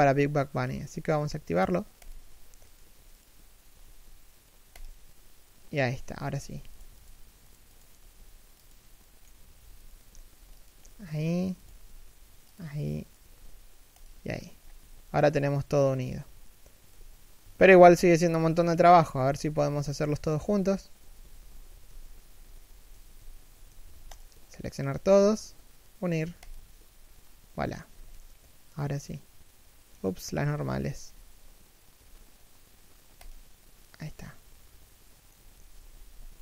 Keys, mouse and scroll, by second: 2.4 right click, 2.5 g, 3.5 g, 5.5 middle click, 6.0 right click, 6.0 g, 6.6 right click, 6.8 g, 7.4 right click, 7.7 g, 8.7 middle click, 9.5 right click, 9.6 g, 10.5 middle click, 11.3 right click, 11.4 g, 12.7 right click, 12.9 g, 14.0-14.3 scroll down 1, 14.5 z, 14.7 middle click, 15.7 KP_3, 16.6 KP_1, 23.4 a, 23.8 alt+right click, 24.7 g, 28.0 middle click, 30.7 a, 31.6 ctrl+n, 33.5 middle click.